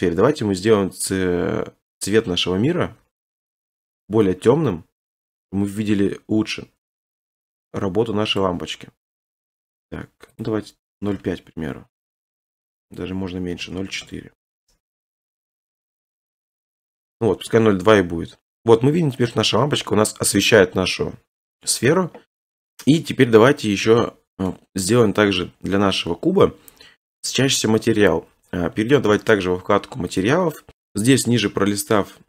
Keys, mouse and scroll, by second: 3.4 click, 8.4 click, 8.8-10.4 scroll, 10.5 click, 11.0-11.3 typing, 11.6 Return, 11.6 click, 13.1 Up, 13.1 click, 13.1-13.9 typing, 13.9-15.1 drag, 14.0 Return, 15.1-15.9 typing, 17.1 scroll, 19.0 scroll up 1, 19.2 middle click, 19.3 middle click, 20.4 scroll up 1, 20.5 middle click, 20.6 middle click, 22.8 middle click, 23.8 scroll, 24.5-25.2 scroll, 25.2 click, 28.5-29.1 scroll, 29.1-30.2 scroll, 30.2 click, 30.7-32.2 scroll.